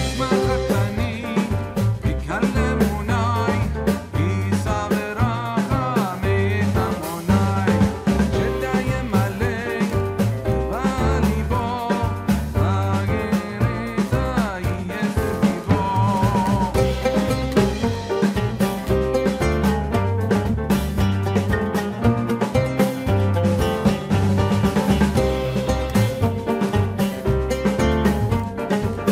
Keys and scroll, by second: 13.3 Return.